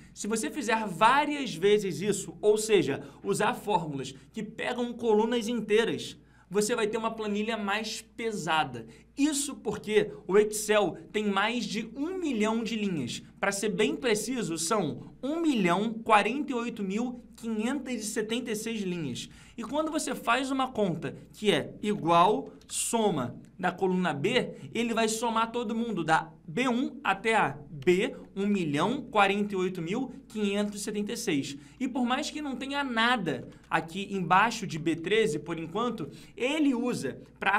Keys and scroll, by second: 14.5 ctrl+Down, 19.3 ctrl+Up, 28.7 ctrl+Left, 29.7 ctrl+Down, 33.4 ctrl+Up.